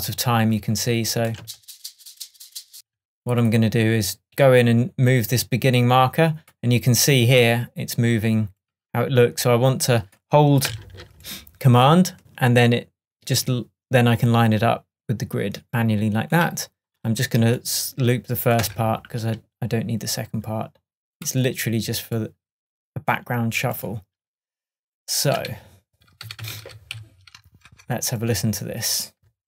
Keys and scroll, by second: 1.5 space, 2.8 space, 18.7 BackSpace, 25.6 super+d, 27.7 super+BackSpace, 28.4 BackSpace.